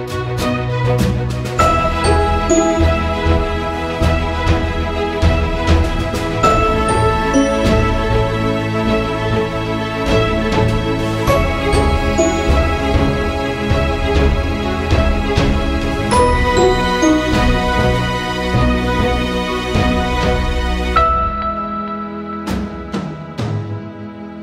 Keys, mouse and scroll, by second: 1.1 click, 2.5 typing, 2.6 click, 11.1 click, 11.1 typing, 13.1-20.1 drag, 20.8 click.